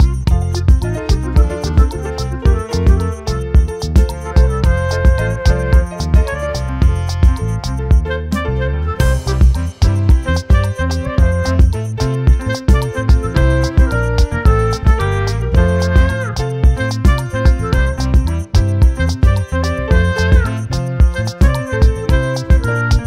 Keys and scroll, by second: 0.7 ctrl+t, 13.1 ctrl+t.